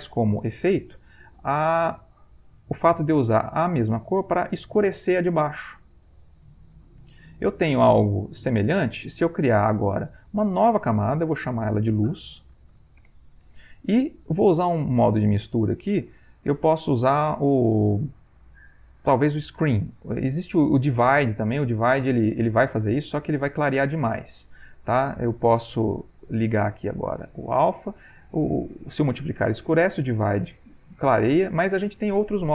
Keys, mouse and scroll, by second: 0.5 click, 1.1-3.4 drag, 3.5-9.0 drag, 11.5 click, 12.3-13.3 typing, 14.8 click, 21.6 click, 22.6 click, 23.2-24.8 drag, 27.1 click, 28.1 click, 28.6-32.5 drag.